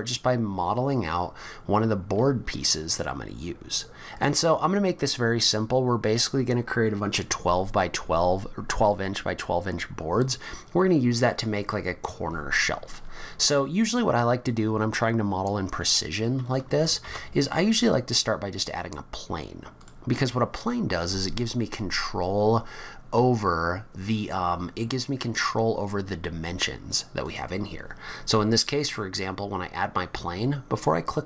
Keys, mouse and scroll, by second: 11.0-11.5 scroll down 5, 12.7-13.2 scroll up 4, 17.0 shift+a, 27.2 click.